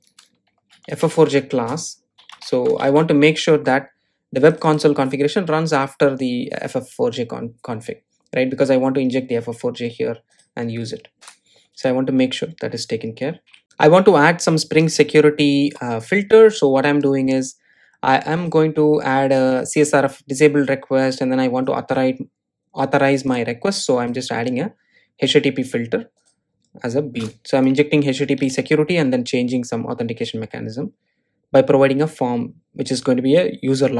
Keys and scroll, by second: 2.5 Return, 16.7 super+v.